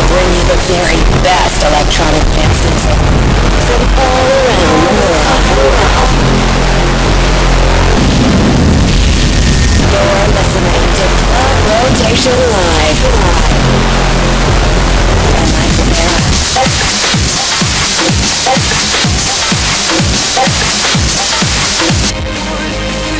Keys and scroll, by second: 22.1 Page_Down.